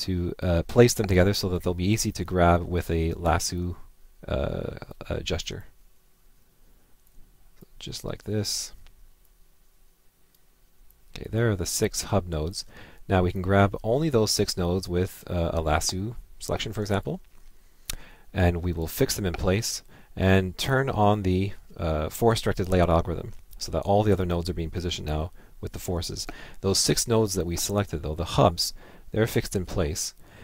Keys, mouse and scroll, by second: 13.4 click, 16.9 click.